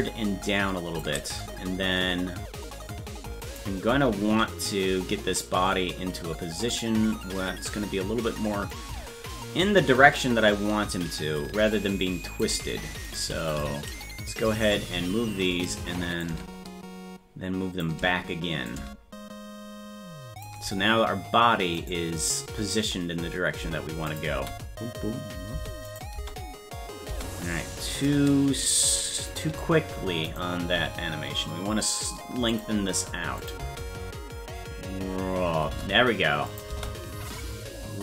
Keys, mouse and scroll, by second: 3.5-8.4 right drag, 8.7-12.4 drag, 13.2 right click, 13.6 shift+right click, 14.6 alt+r, 16.2-17.8 drag, 18.6-20.4 drag, 21.9 right click, 24.1 click, 24.3 space, 25.8 click, 26.1 space, 28.6-30.3 shift+right drag, 30.7 g, 33.4 click, 33.6 space, 36.5 click, 36.7 space.